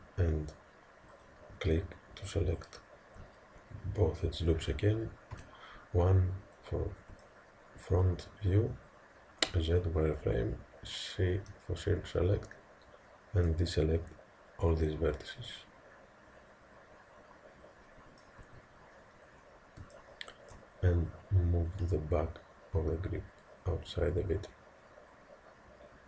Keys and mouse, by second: 1.1-4.4 drag, 5.4 KP_1, 7.2-9.5 middle drag, 9.5 z, 11.4 c, 19.9-25.0 middle drag, 21.5 g.